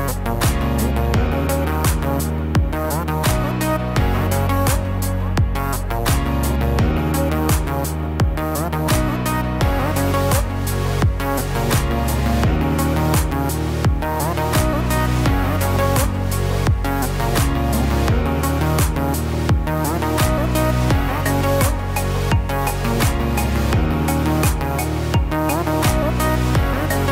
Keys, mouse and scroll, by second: 1.1-1.5 scroll down 2, 1.5 middle click, 8.9 click, 9.6 shift+click, 14.3 f, 14.6 y, 15.7 Escape, 17.2 ctrl+z, 18.6 ctrl+z, 19.6 middle click, 20.7 e, 23.4 e.